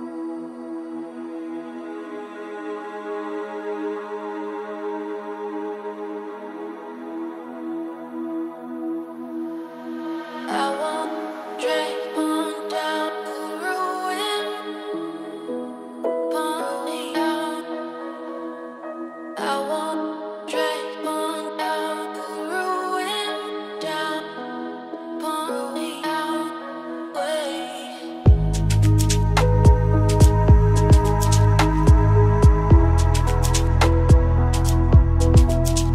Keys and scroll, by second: 0.6 ctrl+z, 29.4 ctrl+z, 35.3 ctrl+space.